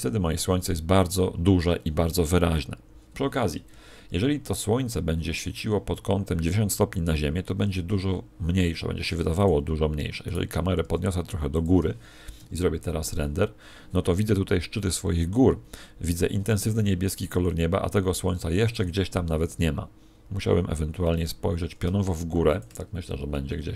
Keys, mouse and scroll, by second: 7.0 Escape, 8.0 r, 9.4 click, 10.2 right click, 10.8 r, 11.6 click, 17.8 Escape, 22.5 click.